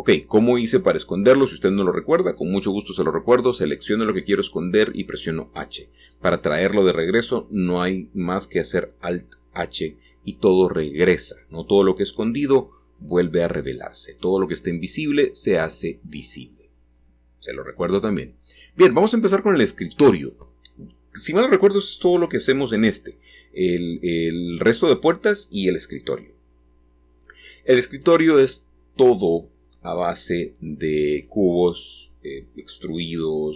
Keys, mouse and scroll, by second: 2.2-6.2 drag, 6.2-8.5 scroll down 1, 8.7 g, 10.8-12.0 drag, 12.0-17.2 scroll up 1, 18.0-20.5 middle drag, 20.7-23.2 drag, 24.0-26.3 drag, 26.3-28.0 scroll up 1, 28.0-28.3 scroll up 1, 29.3 g, 32.0-33.5 drag.